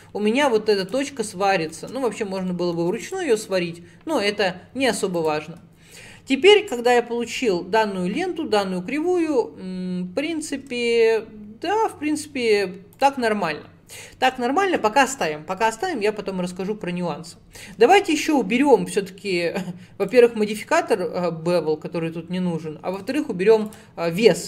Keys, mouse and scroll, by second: 0.0 click, 1.2-1.6 scroll down 8, 1.7 shift+middle click, 2.5 shift+middle click, 3.1 click, 5.2 click, 13.0 click, 13.5 scroll up 1, 17.7 a, 20.1-23.8 drag.